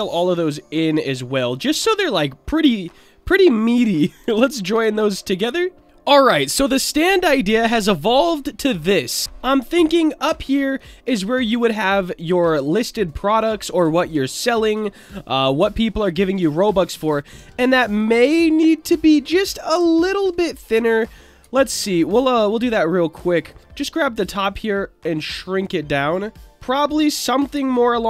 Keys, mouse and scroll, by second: 0.3-1.0 middle drag, 1.7 click, 2.0-2.4 middle drag, 3.3-3.6 drag, 4.6 ctrl+j, 5.5-5.8 middle drag, 9.5 click, 11.6 shift+middle drag, 12.1-13.4 middle drag, 15.7 middle click, 16.9 Tab, 17.3 Tab, 17.5 middle click, 18.2 Tab, 19.2 middle click, 19.9 alt+middle click, 20.1 alt+middle click, 21.4 z, 22.6 click, 24.4-26.5 drag, 26.5 Tab, 27.5 z.